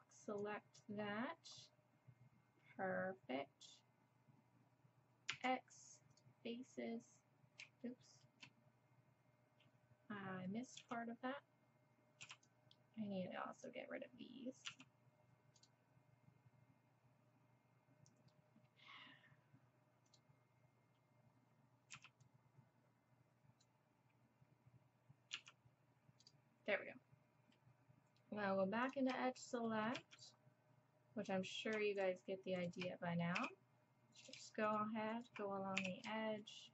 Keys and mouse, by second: 5.3 x, 10.8 x, 12.2 b, 14.7 x, 20.1-21.9 drag, 21.9 b, 25.4 x, 26.7 click, 28.8-33.1 drag, 30.0 z, 33.4 f, 33.5-36.7 drag, 35.8 f.